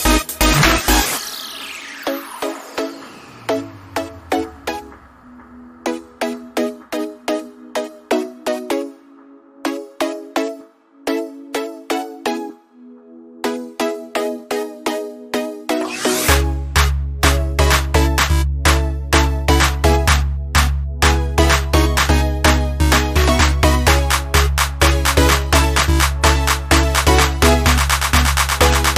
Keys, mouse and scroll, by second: 5.8 alt+Num_Lock, 5.8 click, 6.1 alt+scroll up 1, 7.2 space, 7.3 click, 7.6 space, 7.8 space, 12.3 click, 22.4 Escape, 28.8 click.